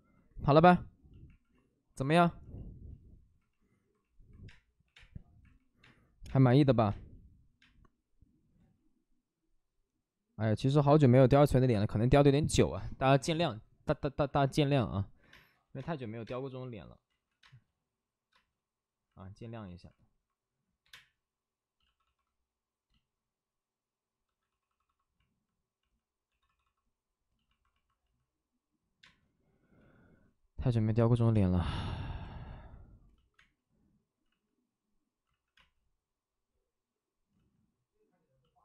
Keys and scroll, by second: 0.3 1, 4.4-6.2 typing, 8.5 space, 8.6 ctrl+z, 15.2 1, 15.2 space, 15.8 space, 16.2 space, 17.1 ctrl+z, 17.4 space, 20.8 3, 21.8 shift+d, 24.0 shift+d, 29.0 d, 29.0 space, 29.7 b, 31.3 space, 32.5 ctrl+z, 33.3 space, 34.2 ctrl+z, 35.2 ctrl+z, 35.5 space, 37.3 ctrl+z.